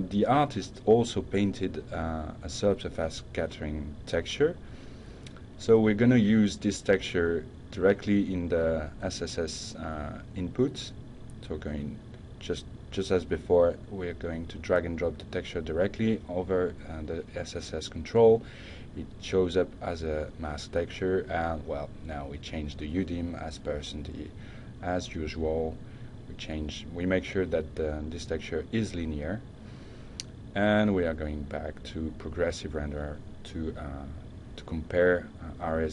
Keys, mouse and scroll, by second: 1.6-2.0 drag, 2.6 drag, 3.8 click, 7.5 click, 16.6 click, 18.9 click, 20.4 Right, 20.8 Right, 21.3 Right, 22.3-23.0 typing, 23.6 Return, 29.1 drag, 30.0 click, 30.5 click.